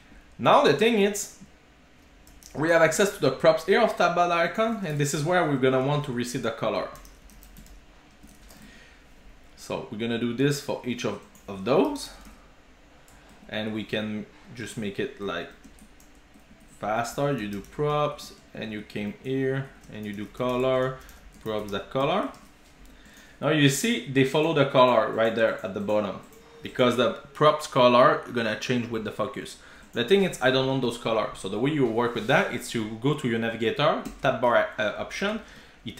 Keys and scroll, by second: 2.9 Escape, 5.6 Return, 8.4 alt+shift+super+p, 13.3 super+z, 16.0 ctrl+g, 22.0 Return, 22.3 super+s, 34.1 Return.